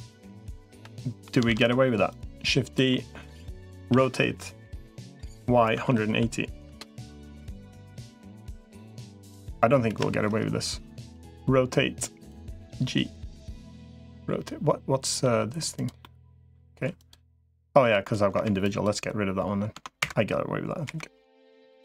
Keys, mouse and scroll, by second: 0.2 l, 0.6 l, 0.8 middle click, 1.4 shift+d, 2.0 click, 2.7 middle click, 3.8 r, 7.7 middle click, 8.9 middle click, 9.8 KP_1, 10.8 r, 12.4 g, 14.0 r, 15.0 g, 15.8 middle click, 16.8 click, 17.6 l, 18.2 Delete, 20.6 Delete.